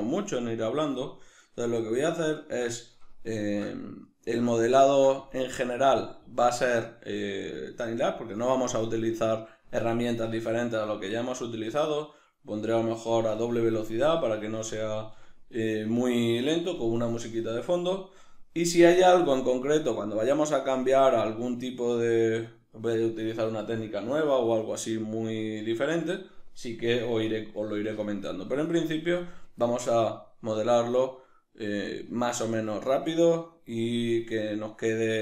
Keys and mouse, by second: 7.6-11.8 right drag, 11.8-29.2 middle drag, 29.2-34.0 right drag, 34.0-35.2 middle drag.